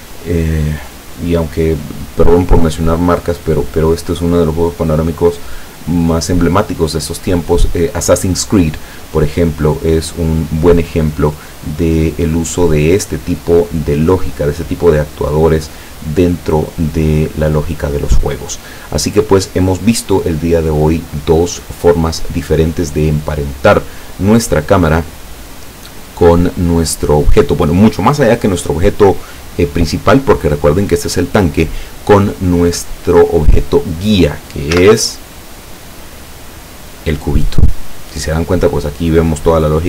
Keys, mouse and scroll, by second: 34.8 z, 35.2 right click, 35.7 right click, 36.2 right click, 38.5-38.9 scroll down 1.